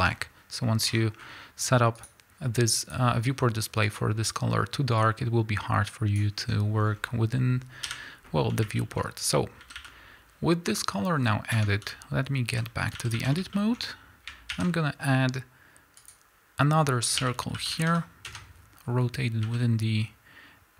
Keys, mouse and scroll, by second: 0.0 Tab, 2.0 click, 6.9 scroll down 1, 8.8-9.6 shift+middle drag, 9.2-9.6 scroll up 2, 9.6 a, 11.6 Tab, 12.6 z, 13.0 a, 13.5-16.1 shift+middle drag, 13.7-16.0 scroll up 3, 16.0 scroll up 1, 16.1 shift+a, 17.2 r, 18.4 KP_Enter, 19.5-20.7 middle drag, 19.5 s.